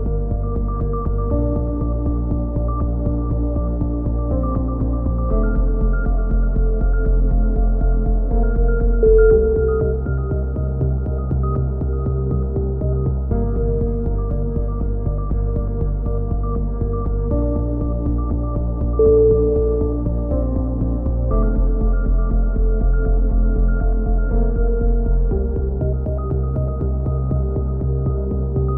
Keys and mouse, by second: 1.8 c, 2.5-3.6 drag, 11.7-12.8 drag, 13.1 g, 15.5 a, 15.9 z, 16.2 z, 16.8 middle click, 18.8 z, 20.3 right click, 21.3-22.6 middle drag, 21.6 c, 24.2-25.6 middle drag, 25.0 KP_7, 26.4-27.4 middle drag, 27.8 s.